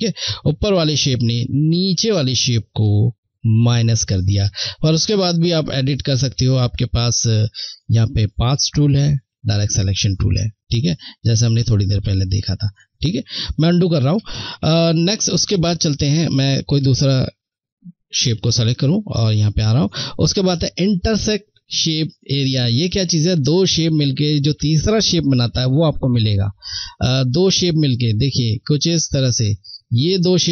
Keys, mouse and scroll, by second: 7.0 click, 10.2 click, 12.9 ctrl+z, 16.2 click, 22.6 click, 28.3 click, 28.3 click.